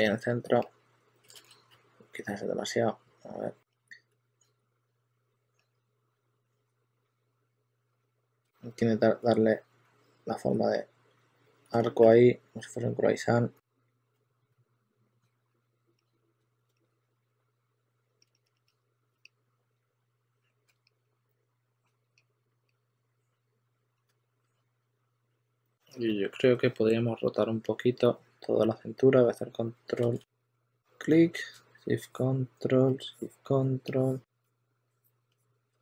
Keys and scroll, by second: 0.4 s, 1.3 super+z, 1.6 s, 2.0 2, 4.0 shift+s, 5.7 2, 6.0 2, 6.9 shift+s, 8.4 shift+super+d, 8.8 shift+super+d, 11.4 shift+super+x, 12.0-15.4 typing, 18.7 2, 20.6 super+a, 20.8 q, 28.1 w, 29.9 super+z, 30.0-30.8 typing.